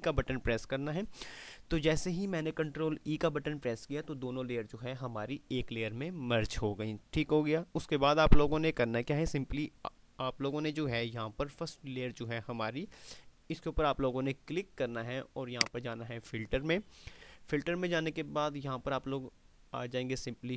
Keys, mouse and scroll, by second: 15.8 click.